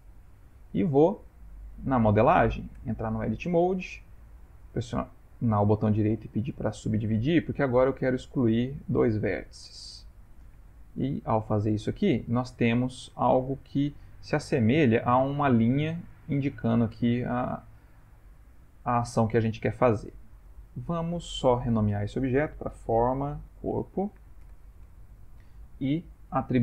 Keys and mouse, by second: 0.1 ctrl+middle click, 0.2 ctrl+middle click, 0.8 ctrl+middle click, 1.2 middle click, 2.7 Tab, 5.2 right click, 7.4 click, 8.3 shift+click, 9.0 x, 10.5 a, 12.5 middle click, 17.6 ctrl+middle click, 18.1 ctrl+middle click, 18.2 ctrl+middle click, 19.7 ctrl+middle click, 20.7 Tab, 21.6 F2, 26.1 click.